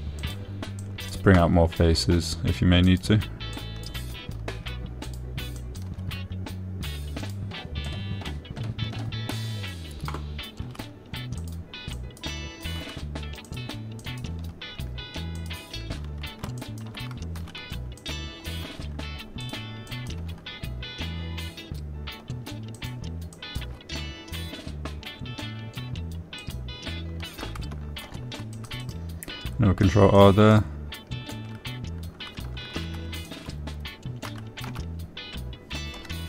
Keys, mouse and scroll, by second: 0.5 e, 1.6 click, 2.3 click, 3.3 g, 4.2 click, 5.0 click, 5.6 g, 6.4 click, 6.9 click, 8.6 click, 9.2 click, 12.0 e, 12.8 click, 13.3 click, 14.2 g, 14.8 click, 15.5 click, 16.7 click, 18.0 shift+click, 19.4 click, 20.0 g, 20.8 click, 21.3 click, 24.1 click, 24.8 click, 25.1 g, 27.8 click, 29.4 ctrl+r, 30.2 click, 31.5 click, 34.1 2, 34.6 alt+click, 35.7 s, 36.1 x.